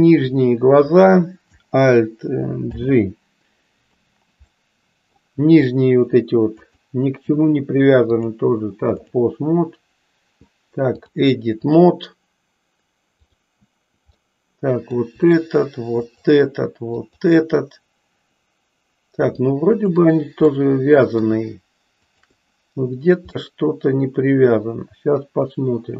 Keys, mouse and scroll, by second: 2.7 alt+g, 4.7 middle click, 6.6 click, 8.2 click, 10.8-11.8 drag, 13.1 click, 14.2 middle click, 15.9 shift+click, 17.1 shift+click, 19.7 shift+click, 20.7 middle click, 22.1 shift+click, 23.4-25.9 middle drag.